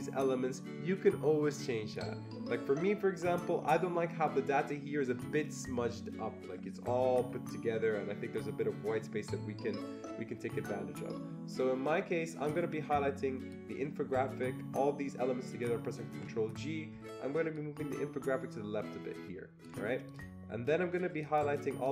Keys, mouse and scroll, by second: 12.4-17.6 drag, 16.1 ctrl+g, 17.6-21.2 shift+drag, 21.2-21.9 shift+drag.